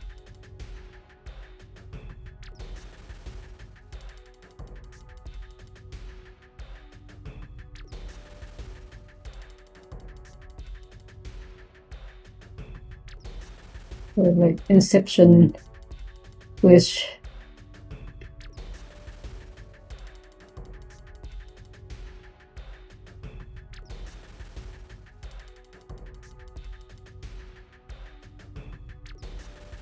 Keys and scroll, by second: 27.9 1.